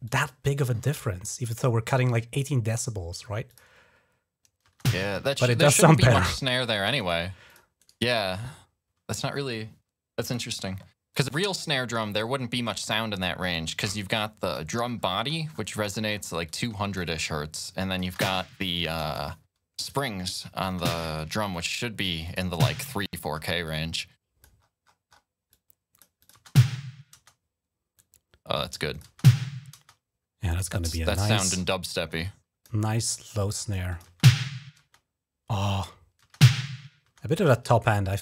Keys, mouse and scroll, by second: 0.0 click, 3.3 click, 4.5-5.2 typing, 6.9 right click, 7.3 click, 7.6 click, 7.6 right click, 10.1 click, 10.9 click, 11.1 click, 13.0 click, 13.8 click, 14.5 click, 14.8-16.0 scroll up 9, 16.3 click, 16.9 space, 17.7 click, 17.9 space, 18.7 space, 18.8 click, 19.6 click, 20.5 typing, 21.4 click, 22.1 click, 23.4 click, 24.4-25.0 scroll up 3, 25.3-26.3 drag, 27.7 click, 28.7 click, 32.0 click, 32.6-33.0 scroll up 2, 33.2 click, 33.7 click, 33.8 space, 34.6 space, 36.0-36.8 typing, 37.2 click.